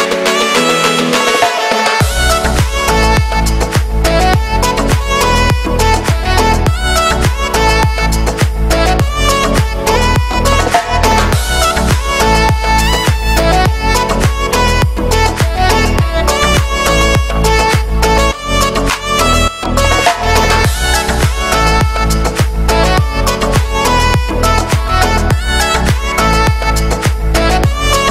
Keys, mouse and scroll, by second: 0.6-2.0 shift+middle drag, 2.0 scroll down 2, 2.2 middle click, 2.3 x, 2.4-3.6 drag, 3.6 shift+middle click, 3.9-4.9 drag, 4.9 scroll up 2, 5.1-6.5 drag, 6.5 shift+middle click, 6.7 scroll up 1, 6.8 x, 6.9 click, 7.5 scroll down 1, 7.6 shift+middle click, 8.0-9.9 drag, 9.9 shift+middle click, 10.6-11.9 drag, 11.9 scroll up 3, 12.1 x, 12.3 click, 12.8 x, 12.9 click, 13.8 shift+middle click, 14.2 x, 14.3 click, 14.7 middle click, 14.9 x, 15.0 click, 15.3 middle click, 15.4 x, 15.5 click, 16.2 middle click, 16.4 x, 16.5-18.6 drag, 18.6 shift+middle click, 19.1 click, 19.5 x, 20.1 shift+middle click, 20.3 scroll down 2, 21.0 click, 21.9 middle click, 21.9 scroll down 2, 22.2 click, 22.6-23.7 middle drag, 22.8 scroll down 1, 23.7 click, 24.6 scroll up 2, 24.7 scroll down 1, 24.8 click, 25.6 x, 25.7-28.1 drag.